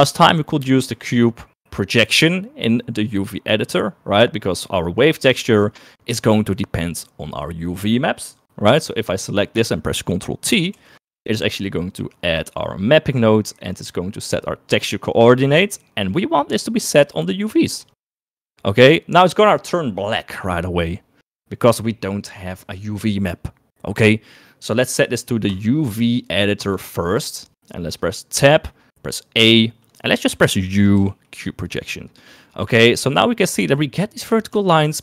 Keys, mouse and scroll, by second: 9.2 middle click, 11.1 ctrl+t, 11.4 middle click, 14.6 click, 15.2 click, 17.1 click, 17.4 click, 25.6-26.8 drag, 28.6 Tab, 29.4 a, 31.0 u, 33.5 Tab, 34.5 Tab.